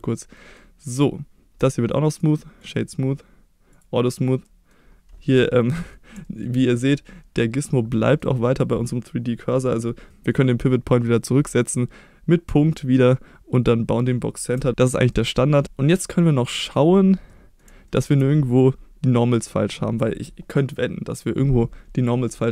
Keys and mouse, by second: 0.3 middle drag, 0.9 click, 2.1 right click, 3.7 click, 4.4 middle click, 5.7 middle click, 6.2 shift+middle drag, 6.6 middle drag, 7.9 middle click, 10.1 middle click, 15.1-15.5 middle drag, 16.2-16.7 middle drag, 17.3 middle drag, 17.9 shift+middle drag.